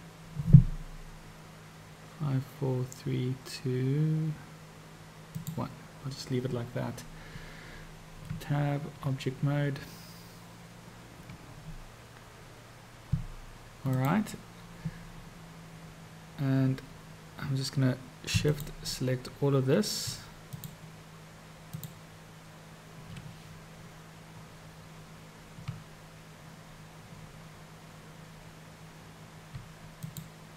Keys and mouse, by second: 1.8 r, 8.3 Tab, 13.9 click, 18.4 shift+click, 21.8 shift+click, 30.0 shift+click.